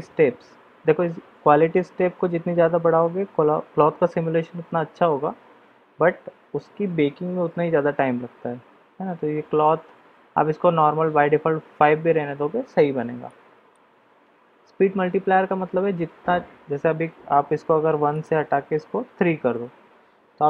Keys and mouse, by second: 13.2 middle click, 18.1-19.7 drag.